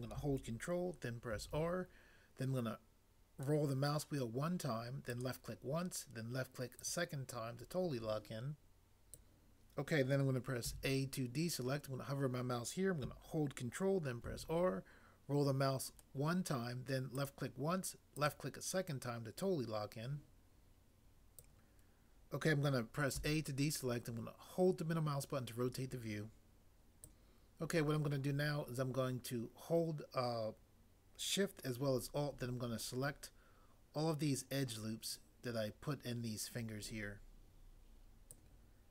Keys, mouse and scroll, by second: 1.3 ctrl+r, 10.6 a, 14.3 ctrl+r, 23.2 a.